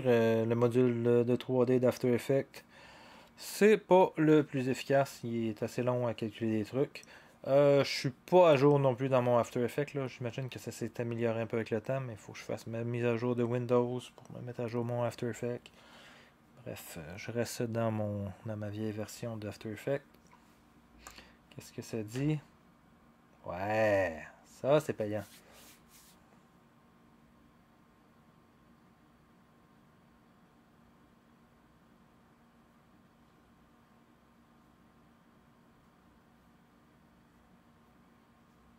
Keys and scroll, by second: 22.1 0.